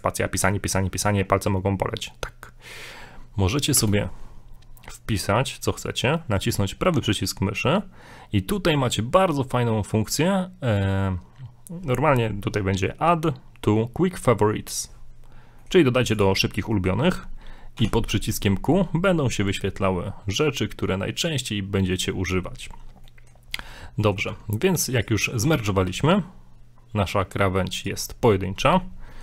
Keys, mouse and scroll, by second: 3.8 space, 16.7 middle click, 17.8 o, 23.0 middle click, 23.6 Tab, 24.0 Tab, 24.0 middle click, 24.3 middle click, 24.6 Tab, 24.9 right click, 25.2 right click, 25.2 scroll up 2, 25.5 middle click, 25.9 middle click, 25.9 g, 28.1 scroll down 2, 28.2 middle click, 28.9 scroll down 3, 29.1 middle click.